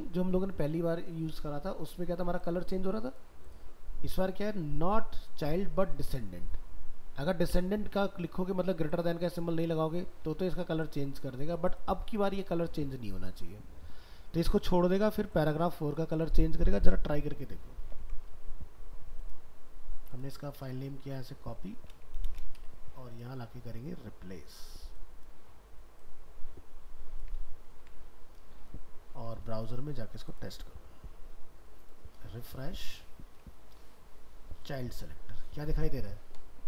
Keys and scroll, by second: 17.8 ctrl+s, 20.7 alt+莽, 20.8 alt+ë, 22.3 ctrl+c, 27.4 ctrl+v.